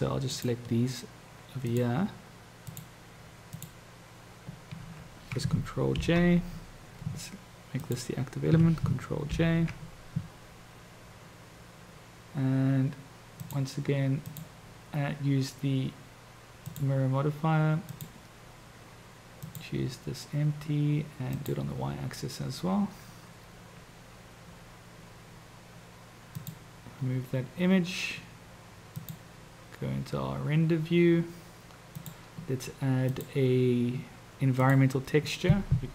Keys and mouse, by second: 0.3-2.0 shift+drag, 3.6 shift+click, 6.0 ctrl+j, 7.7 shift+click, 9.2 ctrl+j, 13.4 click, 14.3-16.9 drag, 17.9-19.7 drag, 21.3-21.7 drag, 26.3 click, 29.4 click, 32.2-33.2 drag, 34.9 click.